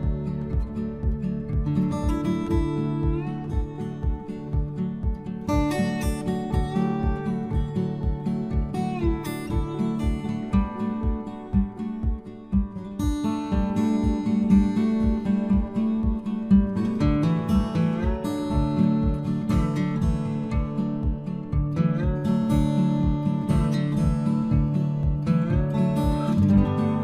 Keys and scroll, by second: 21.9 Return.